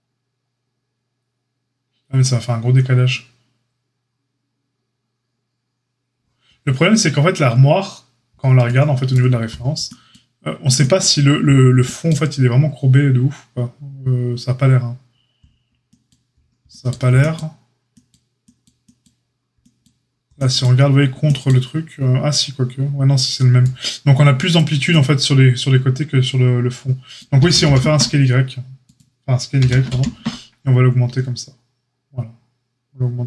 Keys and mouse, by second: 27.3 g, 29.5 s.